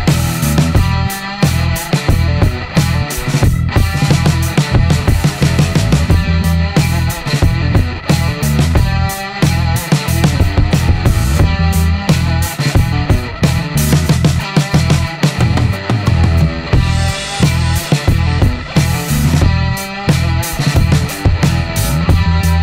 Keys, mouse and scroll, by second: 1.0 e, 4.5-6.2 middle drag, 11.6-12.7 scroll up 3, 12.9 scroll up 1, 13.4-13.8 scroll up 1, 16.1 click, 18.7 click, 19.7 click, 20.1 right click, 21.4 click.